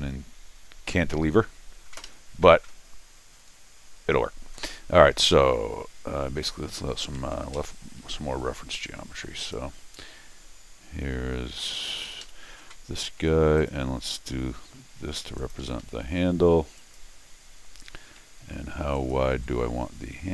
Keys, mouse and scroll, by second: 2.0 Escape, 3.5 scroll down 2, 3.9 scroll up 2, 7.4 alt+l, 9.4 click, 11.7 click, 12.1 Escape, 12.2 Escape, 13.6 click, 15.4 click, 15.8 Escape, 16.8 click, 18.9 ctrl+click.